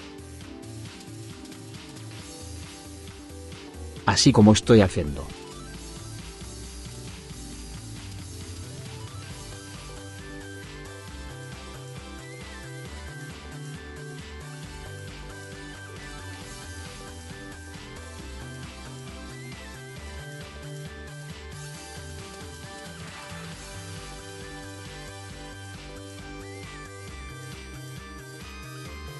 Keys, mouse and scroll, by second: 0.5 right click, 5.3 right click, 17.5 click, 17.8-19.2 drag, 21.3 click, 22.1 right click, 23.3 right click, 24.7 right click, 26.6 right click.